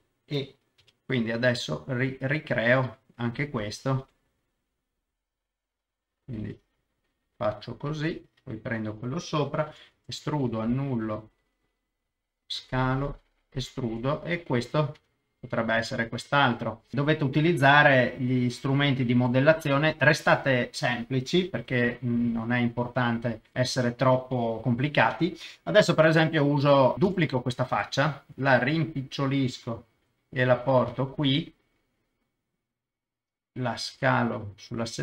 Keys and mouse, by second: 0.8 g, 0.8 middle click, 2.6 click, 4.0 g, 4.1 middle click, 5.6 click, 6.4 g, 6.5 middle click, 8.0 click, 8.6 click, 9.7 e, 9.9 Escape, 10.5 s, 12.5 click, 12.7 e, 13.5 click, 15.0 Tab, 15.9 Tab, 16.3 middle click, 17.0 middle click, 18.5 shift+click, 19.4 middle click, 19.9 KP_0, 21.6 g, 21.7 middle click, 22.8 click, 24.6 middle click, 26.2 middle click, 27.1 shift+d, 27.8 Escape, 28.3 s, 28.3 middle click, 29.6 click, 30.0 g, 30.1 middle click, 31.0 click, 31.2 KP_0, 33.9 s, 34.0 middle click, 34.8 click.